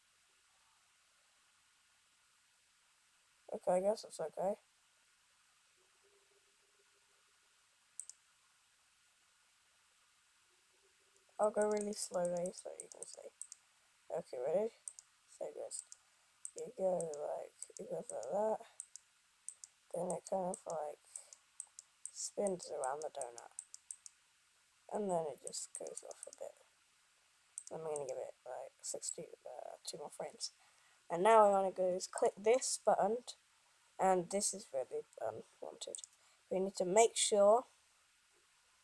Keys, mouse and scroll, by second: 28.0 click, 29.4 click.